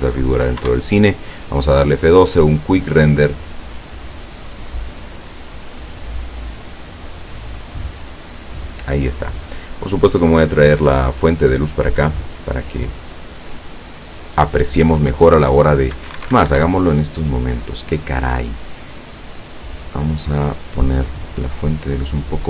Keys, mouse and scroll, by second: 0.7 F12, 16.0 Escape, 16.9-17.3 scroll down 2, 17.3-18.2 middle drag, 18.2 scroll down 1, 19.3 right click, 19.7-20.6 middle drag, 21.0-22.2 drag.